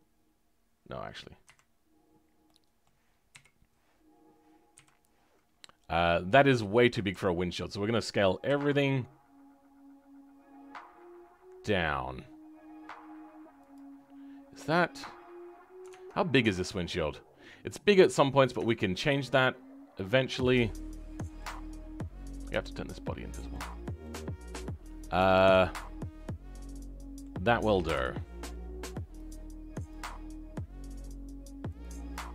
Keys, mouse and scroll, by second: 1.3 a, 2.4 middle click, 3.2 KP_1, 5.1-6.1 scroll down 10, 6.5-7.0 scroll up 2, 7.0 a, 13.8-16.1 scroll down 2, 18.6 scroll down 6, 18.8-19.4 scroll up 2, 19.4-19.8 scroll up 8, 19.9-21.5 middle drag, 21.5-23.3 scroll down 10, 23.3 click, 23.6-23.9 scroll down 3, 23.9-25.3 middle drag, 25.3-25.7 scroll up 2, 25.7-27.9 middle drag, 27.9 KP_7, 28.2-28.7 scroll up 3, 29.8 click.